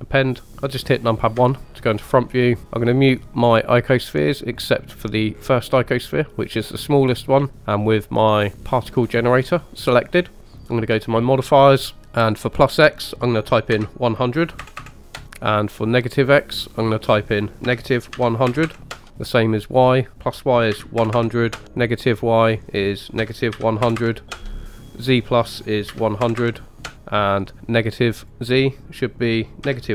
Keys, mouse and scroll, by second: 1.4 KP_1, 2.6-3.9 scroll down 3, 4.1 click, 5.4 click, 5.4-6.2 scroll down 2, 6.6-7.5 scroll up 1, 7.5-7.9 scroll up 1, 8.8 click, 11.2 click, 12.3-15.2 drag, 14.8 KP_0, 16.7-19.1 drag, 18.6 KP_0, 20.1-21.5 drag, 21.1 KP_0, 22.4-24.3 drag, 24.2 KP_0, 25.1-26.9 drag, 26.4 KP_0, 28.2-29.9 drag.